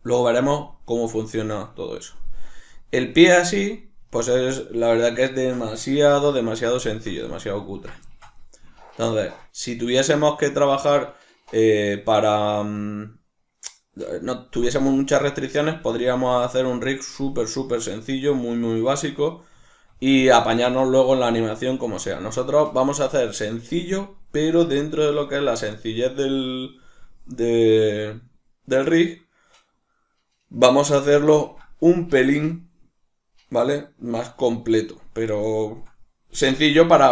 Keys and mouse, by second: 0.7-8.1 middle drag, 5.9 alt+q, 19.7 shift+middle click, 27.8 shift+middle click, 35.4 shift+middle click, 36.7 alt+q.